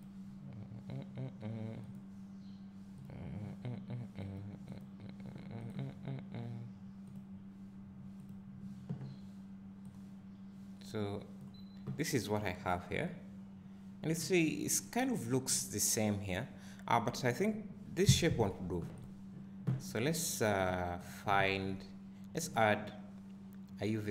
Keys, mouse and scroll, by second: 17.2 click, 18.3 x, 20.6 click, 21.0 click.